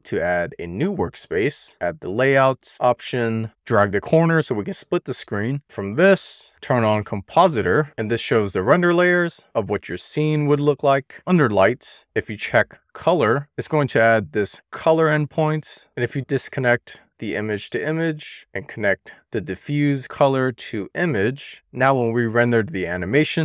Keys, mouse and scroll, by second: 3.5 shift+middle click, 4.0-5.6 drag, 5.9-7.6 drag, 8.3-8.9 scroll down 2, 9.0 scroll up 5, 9.1 shift+middle click, 10.2 scroll up 3, 10.3 click, 11.0 click, 16.1 click, 16.9-18.1 drag, 18.8-20.0 drag, 21.7-23.4 drag.